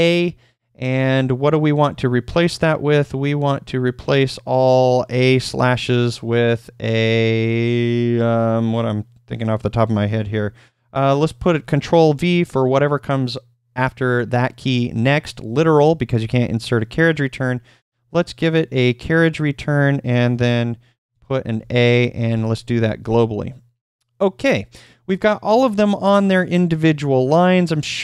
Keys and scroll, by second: 1.9 /, 20.4-23.0 typing.